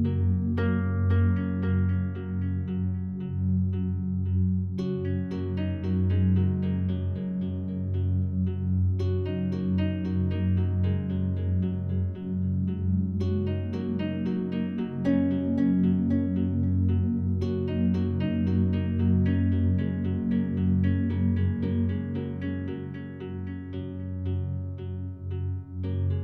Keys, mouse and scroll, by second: 0.8-6.5 ctrl+shift+drag, 7.0 click, 8.5 click, 9.5 click, 10.9 click, 11.8 click, 12.4 click, 13.0 click, 13.7-14.8 drag, 16.0 click, 17.3-18.3 drag, 18.4 click, 19.4 click, 20.6 click, 22.2 click, 24.1-25.2 drag, 26.0 click.